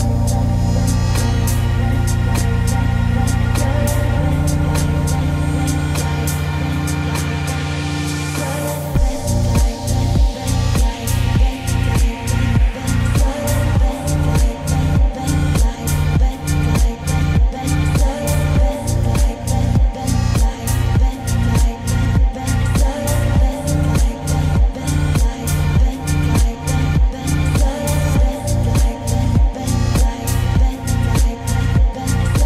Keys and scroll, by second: 13.2 ctrl+z, 15.0 ctrl+;.